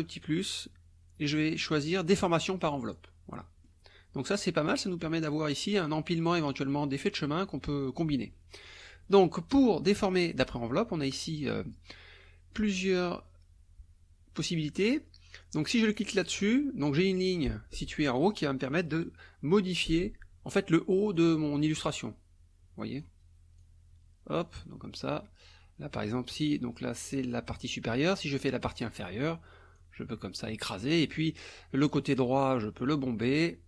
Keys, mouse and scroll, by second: 2.1 click, 2.9 click, 3.4 click, 16.0 click, 19.7-21.4 drag, 21.9-23.2 drag, 23.6-24.8 drag, 28.7 click, 29.8 click, 31.8 click, 32.8 click.